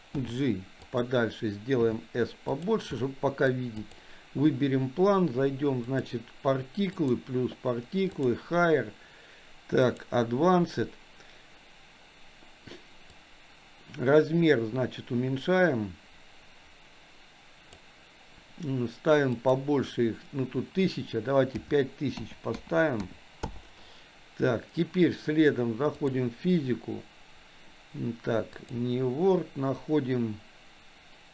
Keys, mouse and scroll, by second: 0.2 g, 1.8 s, 3.0-3.5 middle drag, 3.8 click, 6.0 click, 6.9 click, 8.2 click, 9.9 click, 13.2-17.8 drag, 19.5-23.5 drag, 26.0 click, 28.5-30.9 drag.